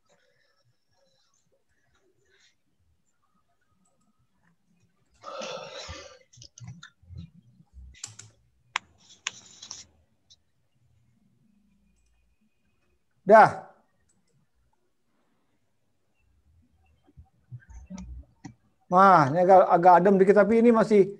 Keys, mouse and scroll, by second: 1.8 click, 9.6 0.